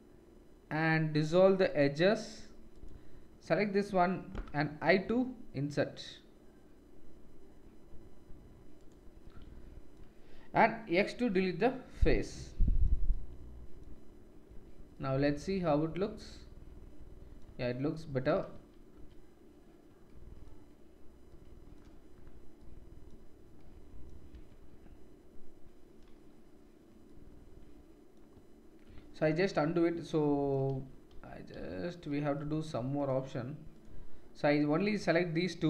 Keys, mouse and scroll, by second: 2.7 middle click, 2.7 right click, 10.9 x, 14.5 Tab, 17.4 Tab, 18.9 ctrl+z, 24.3 Tab, 27.2 middle click, 28.9 ctrl+z, 29.2 ctrl+z, 30.4 middle click, 30.7 ctrl+z, 31.0 ctrl+z, 32.9 click, 33.7 click, 35.3 shift+click.